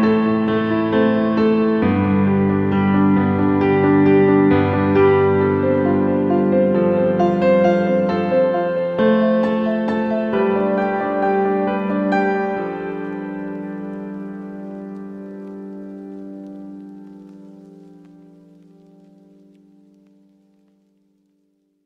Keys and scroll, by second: 19.9 ctrl+q.